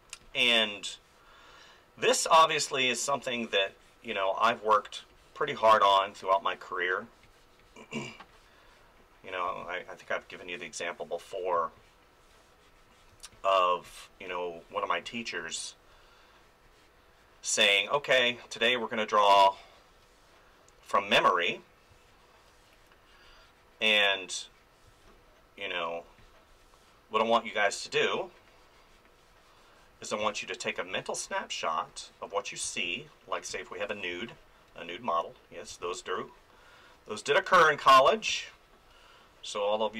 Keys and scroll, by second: 9.5 space, 11.5 space, 15.4 space, 19.3 space, 21.9 space, 24.8 space, 30.2 space, 32.6 space, 35.7 space, 38.3 space.